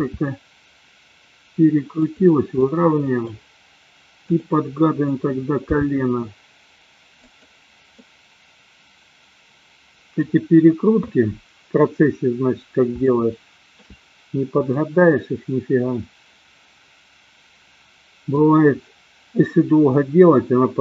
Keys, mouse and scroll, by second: 0.0 r, 2.6 middle click, 4.2 click, 5.7 g, 8.0-10.2 middle drag, 13.0-13.7 shift+middle drag, 14.7-18.4 middle drag.